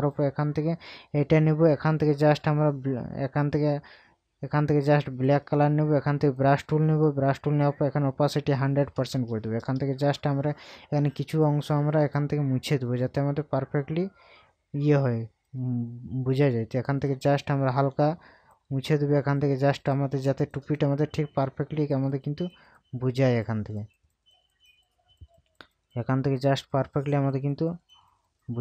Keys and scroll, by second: 9.1 ctrl+KP_Add.